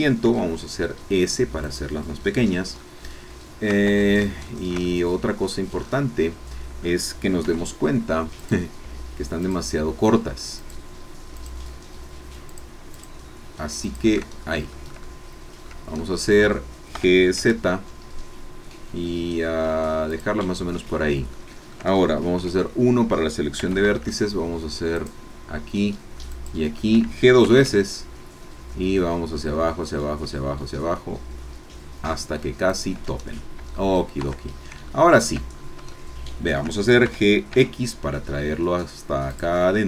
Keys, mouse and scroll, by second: 0.2 s, 1.6-2.6 drag, 2.8-3.9 shift+middle drag, 3.9 shift+Tab, 4.5-5.6 shift+drag, 5.7-6.0 scroll up 1, 6.8-7.1 scroll up 2, 7.6 3, 8.6 click, 9.4 shift+click, 11.6 shift+click, 12.5 shift+click, 12.9 shift+click, 14.1 shift+click, 14.3 shift+scroll down 1, 14.7-15.8 shift+drag, 16.0 shift+click, 16.9 g, 17.4 z, 20.1 click, 20.9 scroll up 2, 21.3 shift+middle click, 22.3 1, 23.7 a, 25.2 alt+shift+click, 26.6 alt+shift+click, 27.4 g, 32.7 shift+click, 33.2-33.5 shift+scroll down 1, 33.7 click, 34.2 Tab, 34.5-34.8 scroll down 1, 34.9 shift+click, 35.5 shift+scroll down 1, 35.9 shift+click, 36.7 shift+middle click, 37.0 shift+g, 37.5 x, 39.3 shift+click, 39.6-39.8 shift+middle drag.